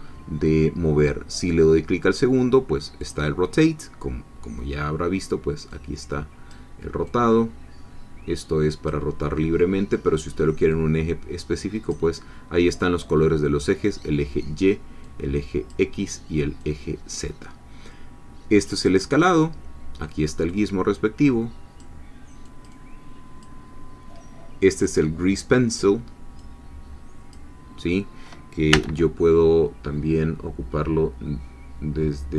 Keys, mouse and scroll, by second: 3.0 click, 5.7 click, 7.1-9.2 drag, 10.7-12.1 drag, 15.0 click, 16.6 click, 18.8 click, 20.5-22.0 drag, 22.5-24.0 drag, 24.7 click, 26.4 click, 28.8 n.